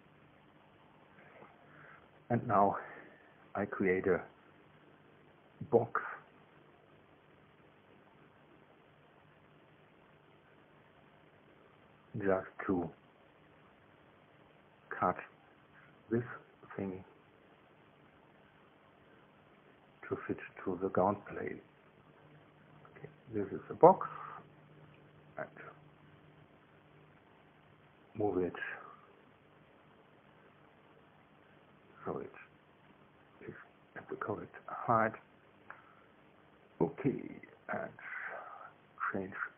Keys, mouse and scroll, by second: 0.8-2.9 middle drag, 3.0 KP_1, 3.9 KP_3, 10.0 click, 16.3 click, 17.7 click, 18.9 KP_Subtract, 19.4 KP_5, 19.7 KP_0, 30.7-31.2 scroll down 4, 31.4-32.4 scroll up 1, 32.5-33.6 scroll up 3, 38.9 click.